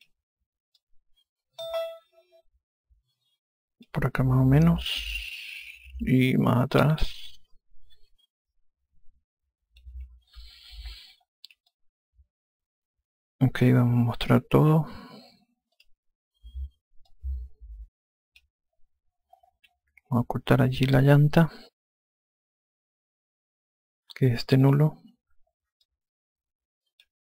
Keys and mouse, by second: 1.4 click, 7.2 click, 11.0 F1, 12.3 alt+click, 16.3 click, 17.7 alt+click, 25.0 click, 26.4 alt+click.